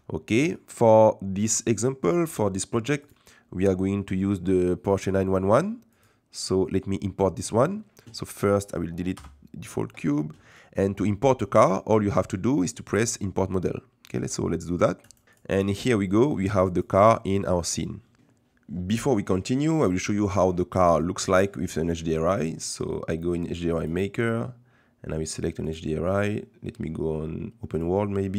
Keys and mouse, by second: 3.2-6.0 drag, 9.1 Delete, 16.7 click, 17.6 middle click, 25.7-27.8 drag.